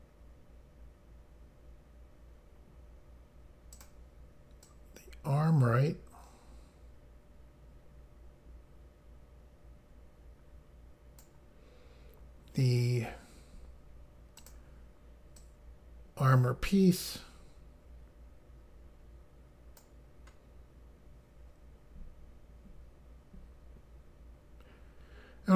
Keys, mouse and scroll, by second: 3.8 click, 4.7 click, 14.4 click, 15.4 click.